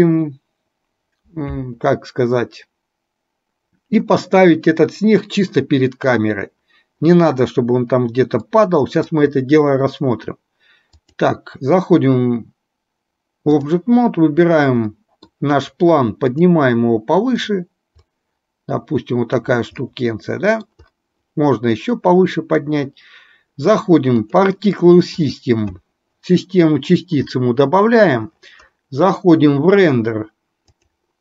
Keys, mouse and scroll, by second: 8.7 middle click, 11.1-13.8 drag, 15.1 middle click, 17.5 click, 18.2-19.6 drag, 20.0-20.8 middle drag, 21.8-24.5 drag, 25.3 click, 30.7 click.